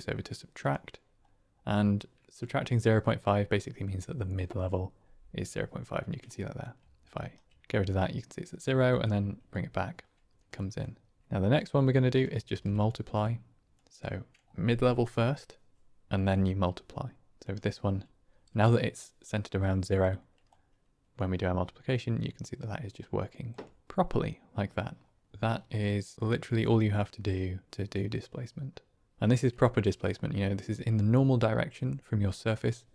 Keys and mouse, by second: 8.3 click, 10.4 middle click, 12.4 shift+d, 13.7 click, 17.4 click, 20.5-23.4 drag, 23.8-24.7 middle drag, 25.7 middle click, 26.5-27.7 drag, 30.6-32.5 drag.